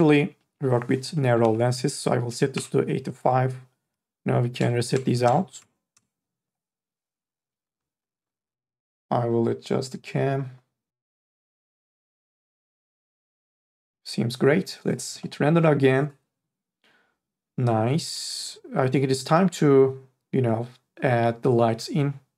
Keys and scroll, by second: 1.6 KP_8, 1.7 KP_5, 2.5 Return, 4.6 KP_0.